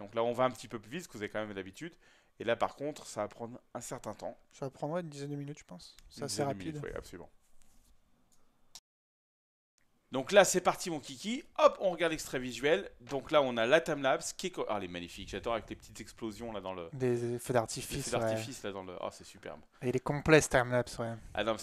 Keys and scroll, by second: 8.8 ctrl+p.